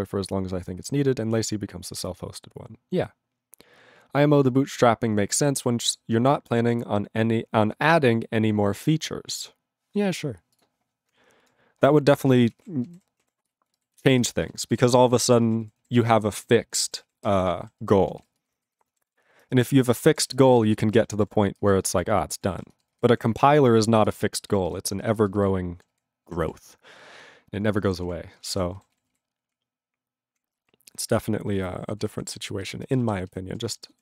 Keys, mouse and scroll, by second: 10.7 click, 11.4 ctrl+e, 12.3 ctrl+s, 12.5 ctrl+space, 12.7 ctrl+p, 12.9 ctrl+g, 13.0 ctrl+e, 13.2 ctrl+a, 13.7 ctrl+e, 14.0 ctrl+b, 14.1 ctrl+b, 14.3 ctrl+space, 14.7 ctrl+alt+b, 14.7 ctrl+g, 15.1 ctrl+s, 15.2 ctrl+space, 15.6 ctrl+alt+f, 15.7 ctrl+g, 16.0 ctrl+s, 17.1 ctrl+s, 17.3 ctrl+space, 17.7 ctrl+alt+b, 17.8 ctrl+g, 18.2 ctrl+s, 18.3 ctrl+space, 18.7 ctrl+alt+f, 18.8 ctrl+g, 19.2 ctrl+s, 19.5 ctrl+space, 19.9 ctrl+alt+b, 20.0 ctrl+g, 20.3 ctrl+s, 20.4 ctrl+space, 20.9 ctrl+alt+f, 20.9 ctrl+g, 21.2 ctrl+s, 21.6 ctrl+space, 22.1 ctrl+alt+b, 22.2 ctrl+g, 22.6 ctrl+s, 22.6 ctrl+space, 23.1 ctrl+alt+f, 23.2 ctrl+g, 23.5 ctrl+s, 24.1 ctrl+space, 24.6 ctrl+alt+b, 24.7 ctrl+g, 25.0 ctrl+space, 25.5 ctrl+alt+b, 26.0 ctrl+g, 26.5 ctrl+s, 28.1 ctrl+s, 28.4 ctrl+space, 28.5 ctrl+e, 28.9 ctrl+s, 29.1 ctrl+g, 29.6-30.4 ctrl+p, 30.7-31.6 ctrl+n, 32.0 ctrl+s, 32.2 ctrl+p, 32.3 ctrl+b, 32.6 ctrl+b, 32.8 ctrl+space, 33.2 ctrl+alt+b, 33.3 ctrl+alt+b, 33.7 ctrl+g.